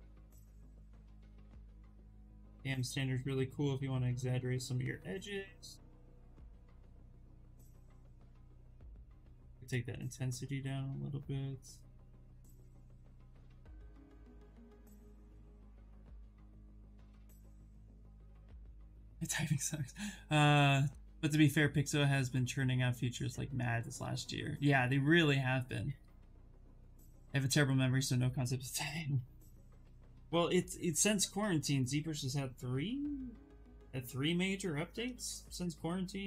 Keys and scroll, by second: 8.1 space.